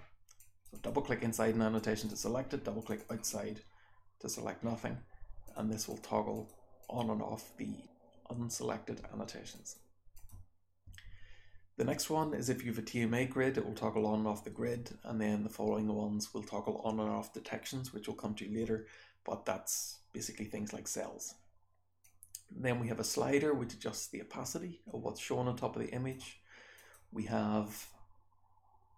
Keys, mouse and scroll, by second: 0.3 click, 0.7 click, 0.7-1.7 scroll down 1, 1.7 click, 1.7-2.7 scroll down 2, 2.0 click, 2.7 click, 2.7-3.8 scroll down 4, 2.9 click, 3.8-5.3 scroll down 1, 5.3 click, 5.3 scroll down 1, 5.8 click, 6.2 click, 6.7 click, 9.5 click, 9.7-14.4 scroll down 1, 10.1 click, 14.4-19.8 scroll down 1, 19.8-22.0 scroll down 1, 22.0-26.1 drag, 22.0-25.1 scroll down 1, 25.1-26.1 scroll down 1, 26.1-26.7 scroll down 1, 26.7 click, 26.9-28.9 scroll down 1.